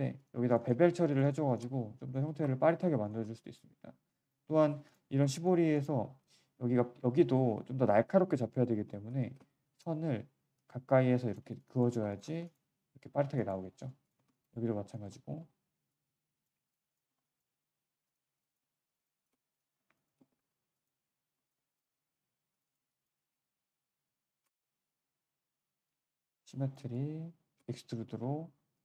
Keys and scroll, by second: 2.2 3, 5.1 1, 6.1 3, 6.5 1, 8.1 3, 8.7 1, 11.4 q, 11.8 3, 14.1 1, 15.2 g, 16.4 q, 28.1 4.